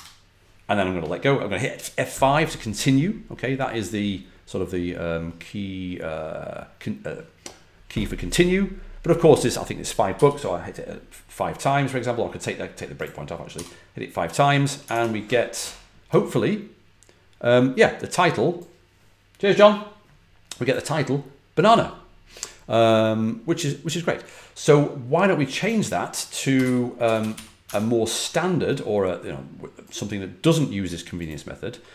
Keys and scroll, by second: 10.0 F5, 13.4 F5, 14.8 super+Tab, 26.3-27.7 typing.